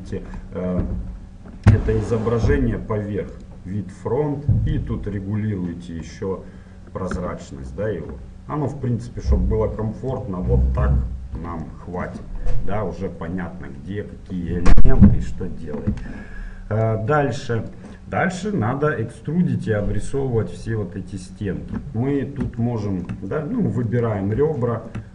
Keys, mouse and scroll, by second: 3.3-6.7 drag, 10.6-14.3 middle drag, 16.9-18.7 drag, 21.7-23.9 middle drag, 23.9 click, 24.3-25.1 middle drag.